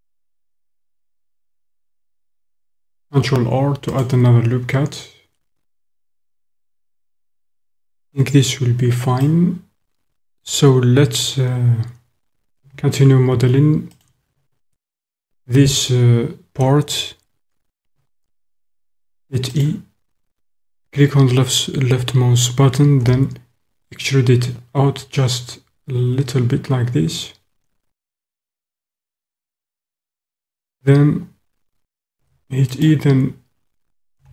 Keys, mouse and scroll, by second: 2.5 ctrl+r, 6.8 click, 7.0 typing, 9.2 click, 9.5-11.3 middle drag, 9.5 typing, 13.9 alt+click, 19.0 e, 19.7 click, 23.0 s, 29.0 click, 32.2 e, 32.9 click, 34.2 s.